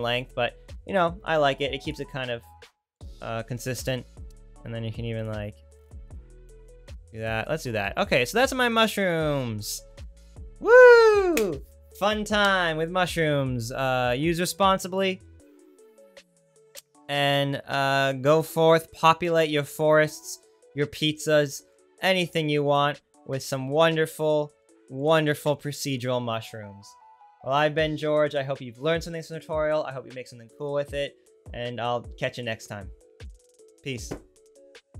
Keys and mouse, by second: 2.0-5.2 right drag, 5.2-19.1 middle drag.